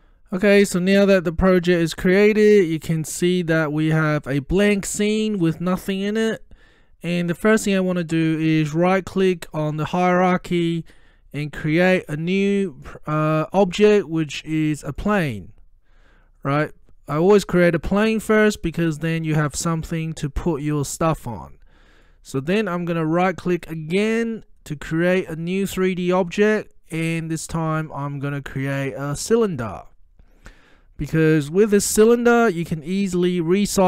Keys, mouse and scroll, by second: 8.8 right click, 8.9 right click, 15.0 click, 16.7-17.2 scroll up 1, 17.2-17.8 middle drag, 18.8-20.3 scroll up 1, 20.3-21.3 middle drag, 23.0 click, 23.7 right click, 29.4 click.